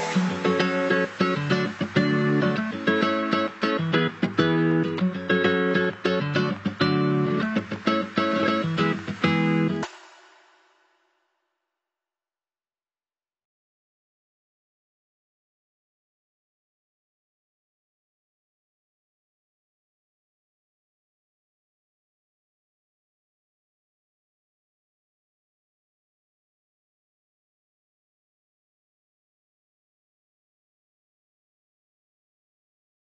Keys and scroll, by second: 6.2 ctrl+=, 6.6 ctrl+BackSpace, 7.3 ctrl+=, 11.8 ctrl+z, 31.4 ctrl+0.